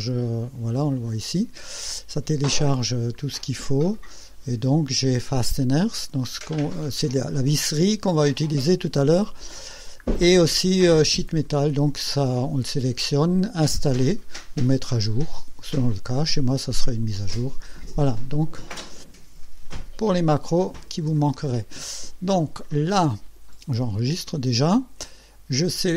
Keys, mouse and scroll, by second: 3.2-3.9 scroll down 4, 3.9 scroll up 2, 4.1-4.5 scroll down 2, 8.9-9.2 scroll down 2, 9.4-10.1 scroll down 4, 11.5 click, 18.2 click, 19.9 click, 21.5 scroll up 2, 24.0 ctrl+s, 24.7-25.5 ctrl+drag.